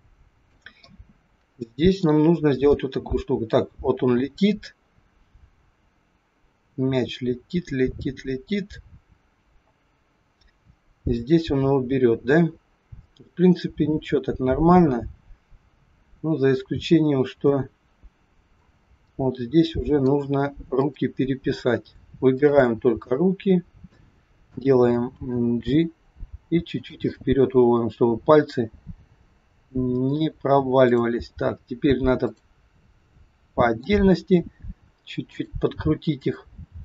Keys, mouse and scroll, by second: 0.8 middle click, 2.8 click, 19.0 middle click, 20.8 click, 22.3 shift+click, 23.0 middle click, 25.1 g, 27.0 middle click, 30.8 click, 32.2 click, 32.9 middle click, 34.4 r, 36.1 click.